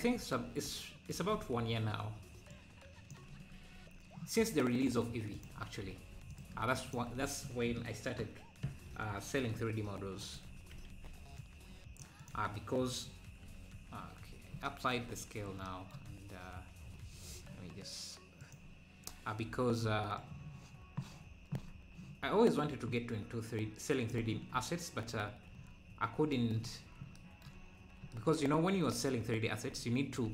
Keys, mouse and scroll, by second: 0.1 scroll, 2.5 click, 3.3 Tab, 3.7 Tab, 6.3-7.9 drag, 9.2 ctrl+shift+b, 10.4 Tab, 10.9 ctrl+a, 13.0 scroll down 1, 14.1 scroll down 3, 16.1 scroll down 6, 16.9-17.3 scroll up 3, 18.4-19.9 drag, 20.2-23.2 shift+drag, 25.6 scroll up 5.